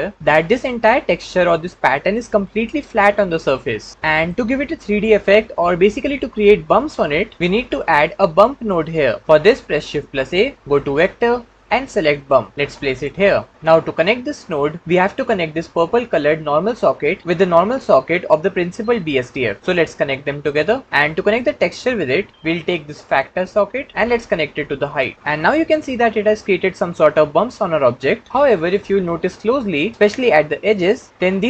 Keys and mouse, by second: 1.0-2.1 middle drag, 4.2 middle click, 9.8 shift+a, 20.0-20.5 drag, 23.0-25.1 drag.